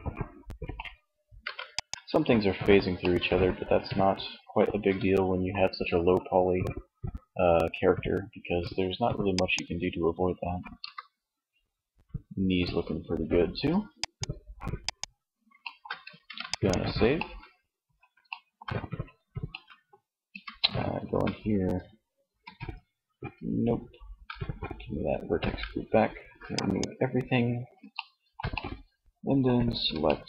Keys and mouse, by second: 0.4 ctrl+s, 2.1-3.5 middle drag, 8.4-10.2 right drag, 9.8 r, 13.3 click, 14.6 shift+middle click, 15.3 ctrl+s, 19.4 Tab, 20.1 a, 21.3 a, 23.3 a, 24.3 a, 25.7 click.